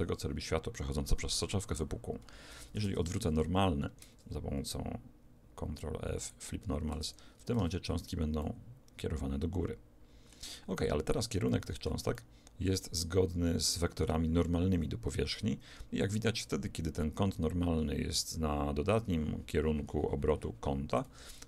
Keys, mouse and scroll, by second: 2.2 Escape, 2.8 Tab, 4.4 ctrl+f, 6.9 Tab, 7.6 alt+a, 8.4-15.3 middle drag, 21.1 Escape.